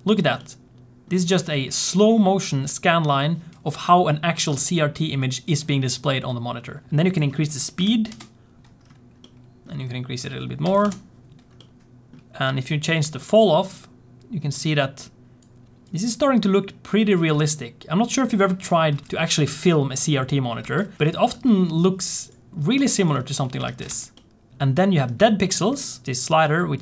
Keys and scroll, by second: 19.1 space, 21.2 space, 23.6 alt+shift+z, 23.8 space, 24.5 space.